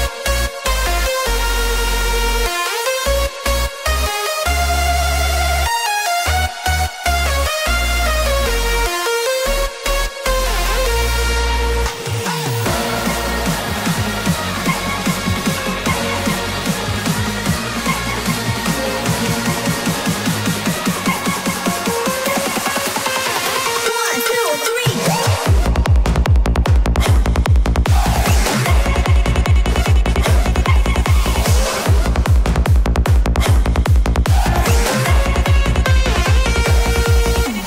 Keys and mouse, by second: 0.8 Tab, 1.9-5.1 middle drag, 7.5-9.9 middle drag, 15.1 click, 22.7-26.8 drag, 27.2-35.0 middle drag.